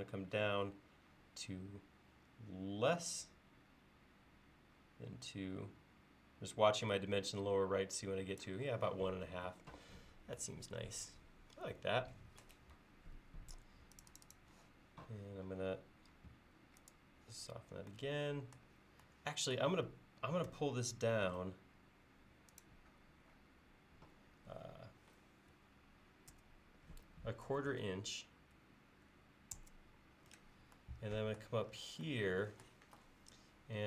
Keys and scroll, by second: 13.6 space, 20.5 p, 26.4-28.2 typing, 29.6 Return.